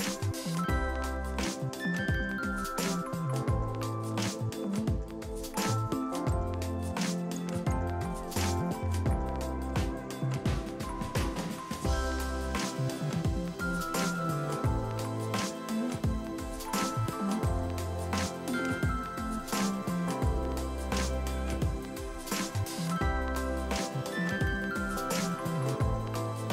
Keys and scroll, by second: 19.7 9, 21.1 0.